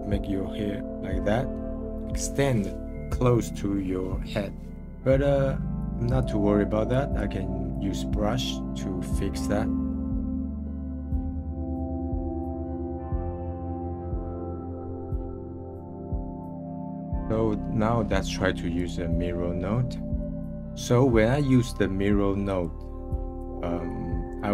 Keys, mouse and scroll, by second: 1.0-4.0 middle drag, 4.7-5.8 middle drag, 5.8-8.1 drag, 8.1 middle click, 8.5-9.3 scroll down 2, 9.3 middle click, 10.1 scroll down 2, 10.1 f, 10.2 f, 10.4 click, 10.9 middle click, 11.2 click, 11.4 middle click, 11.5 click, 11.6 middle click, 11.8 scroll up 9, 12.1 click, 12.4 scroll down 1, 12.6 click, 13.0-14.6 scroll down 4, 13.1 middle click, 15.3 click, 15.5 middle click, 15.9 click, 16.1 middle click, 16.1-17.6 drag, 17.6-18.7 scroll up 2, 18.7-20.2 drag, 22.5-24.5 drag.